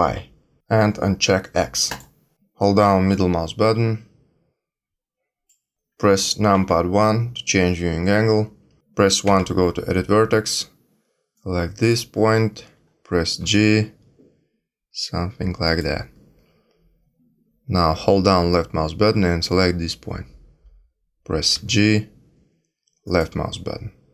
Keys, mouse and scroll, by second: 1.8 click, 3.1 middle click, 6.5 KP_1, 9.2 1, 11.3 click, 13.4 g, 18.4 click, 21.5 g.